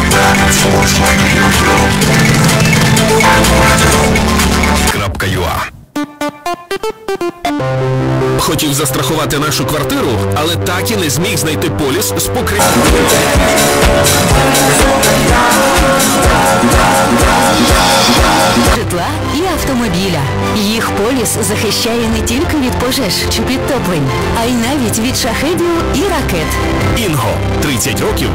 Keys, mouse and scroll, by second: 5.7 Page_Down, 19.2 Page_Down.